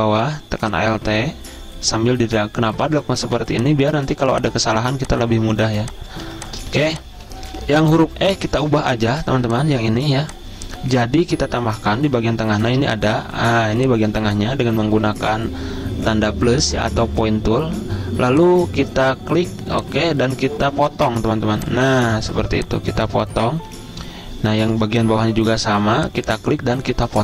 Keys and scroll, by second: 3.6 z, 6.8 v, 7.6 z, 8.9 a, 9.8 a, 12.1 =, 22.4 z, 25.2 a.